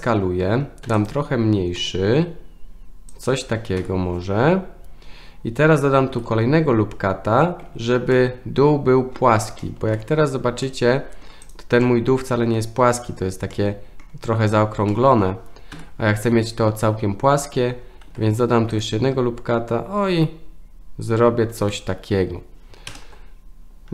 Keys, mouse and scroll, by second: 0.9 3, 1.0 click, 1.8 s, 3.8 KP_1, 6.1 ctrl+r, 8.1-8.6 middle drag, 9.6-9.9 shift+middle drag, 10.6-11.2 middle drag, 11.5 click, 11.8-12.5 middle drag, 13.5 middle click, 14.9 middle click, 15.8 KP_1, 18.1 ctrl+r, 22.9 ctrl+KP_Add.